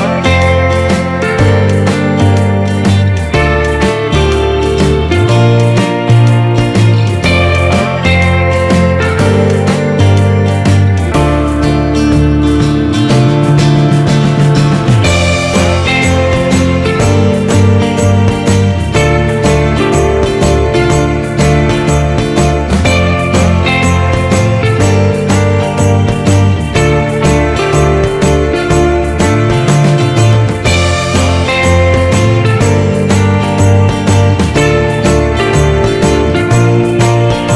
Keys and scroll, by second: 9.0 ctrl+=, 19.4 ctrl+z, 29.2 ctrl+-.